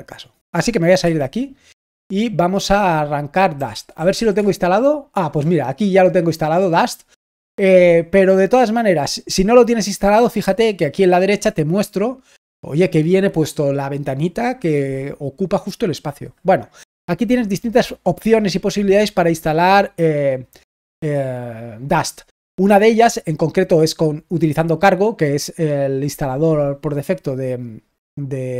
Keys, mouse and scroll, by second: 9.1-11.2 scroll down 2, 11.2-11.8 scroll down 1, 11.8-14.8 scroll up 2.